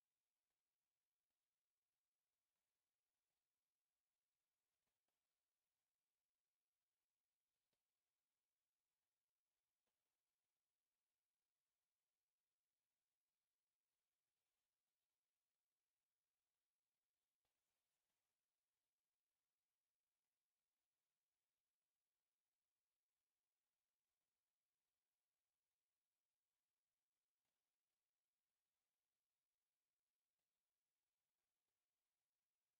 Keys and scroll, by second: 14.6 u, 14.7 space, 15.7 Escape, 15.9 c, 16.1 o, 16.1 space, 16.2 p, 22.3 Escape, 27.2 t, 27.3 space, 28.0 Escape, 28.9-32.2 typing, 29.8 Escape, 30.3 Escape, 31.1 Escape, 31.8 Escape.